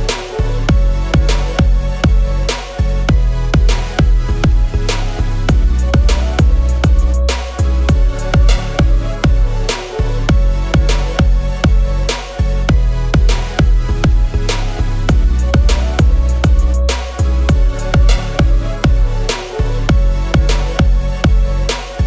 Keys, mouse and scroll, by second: 1.5 shift+click, 2.3 shift+click, 3.6 ctrl+g, 5.0 alt+click, 7.0-7.7 scroll down 1, 7.9-8.8 scroll, 8.8-9.2 scroll up 1, 12.9 right click, 14.6 double click, 19.0 i.